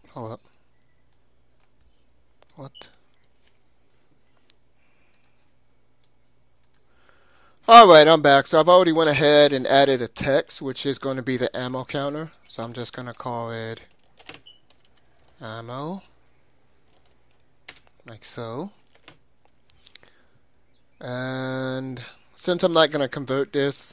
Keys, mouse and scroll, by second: 1.7-3.4 drag, 2.6-4.4 middle drag, 11.8 Tab, 12.6-15.2 typing, 17.0 o, 17.7 Return, 19.1 Tab, 22.0-23.8 middle drag, 23.8 click.